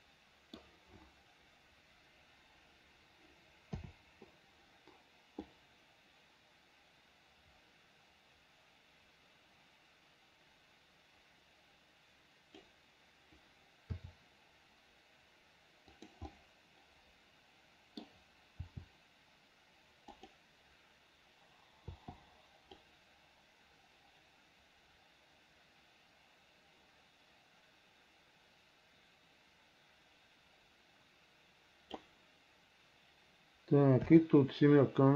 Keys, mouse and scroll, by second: 4.0 KP_7, 5.7-12.9 drag, 14.2 r, 16.5-18.3 middle drag, 18.8 r, 23.0-32.3 drag, 34.3 KP_7.